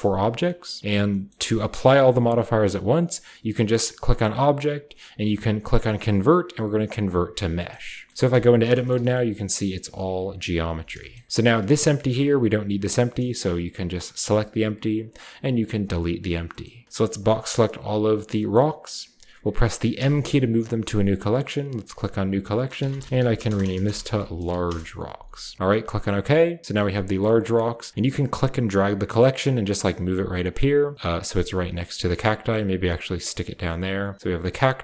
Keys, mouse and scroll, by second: 1.3 middle click, 1.7 scroll down 2, 2.0 scroll up 2, 4.0 click, 7.0 click, 7.5-8.0 shift+middle drag, 8.0 click, 8.1-8.6 scroll up 1, 8.3 Tab, 8.6-10.1 scroll down 1, 8.9 a, 9.0 a, 10.7 Tab, 11.3-12.9 shift+scroll up 1, 11.5-13.0 shift+middle drag, 11.7 g, 12.1-14.2 shift+drag, 12.2 r, 14.2 x, 16.0 click, 16.3-18.1 scroll down 1, 17.0-19.9 drag, 19.9 m, 21.6 middle click, 21.6 typing, 21.8-23.0 drag, 22.7-25.3 typing, 25.5 click, 26.7 click, 28.0-30.2 drag, 31.2-31.6 drag, 32.1-33.9 drag, 34.0 click, 34.2 click, 34.5 click.